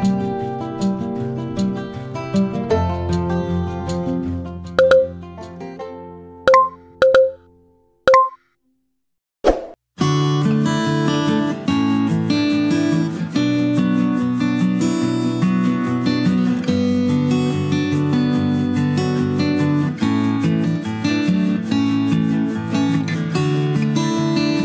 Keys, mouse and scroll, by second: 4.4 shift+d, 6.9-7.8 right drag, 15.8-18.2 drag, 19.6 click, 21.6-22.4 middle drag.